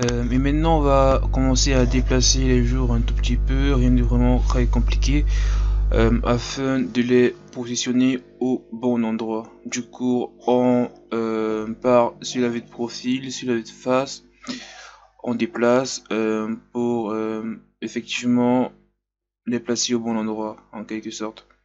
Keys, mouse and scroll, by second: 0.0 scroll down 1, 0.6 scroll up 3, 0.9-3.1 drag, 3.1 z, 3.6 s, 4.8-6.2 drag, 6.6 middle click, 6.9 scroll up 3, 7.1-8.5 middle drag, 8.5 KP_3, 9.3-10.7 drag, 10.7-12.0 middle drag, 12.0 click, 12.6 KP_1, 12.9-13.3 scroll up 2, 13.3 r, 14.7 Tab, 15.0-15.3 scroll down 1, 15.3 scroll up 2, 15.5 Tab, 16.3 g, 17.3 r, 18.6 g.